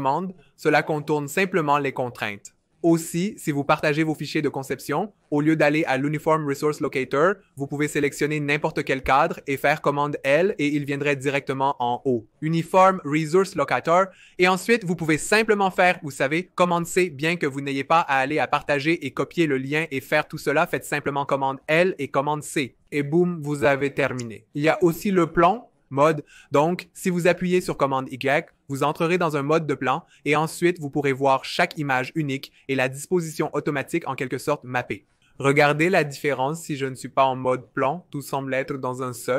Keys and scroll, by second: 1.4 super+z, 8.9 super+l, 14.5 super+c, 21.4 super+l, 22.2 super+c, 25.9 super+y, 37.1 super+y.